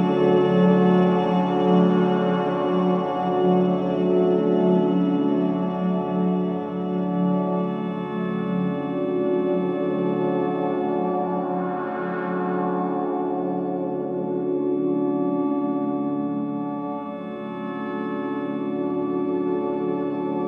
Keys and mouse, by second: 1.0 shift+click, 1.1 typing, 2.6-4.0 drag, 4.1-5.4 drag, 5.2 typing, 5.8 click, 6.4-7.2 drag, 7.8 click, 8.4-9.0 drag, 9.2 typing, 9.4-11.3 drag, 11.5 typing, 12.7-13.5 typing, 13.1 click, 15.4 typing, 17.0-18.6 typing, 17.7-19.1 drag.